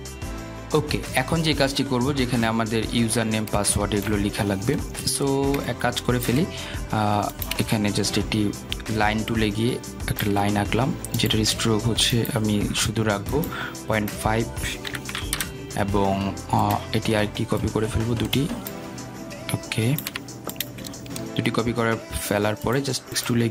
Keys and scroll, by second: 17.7 Return.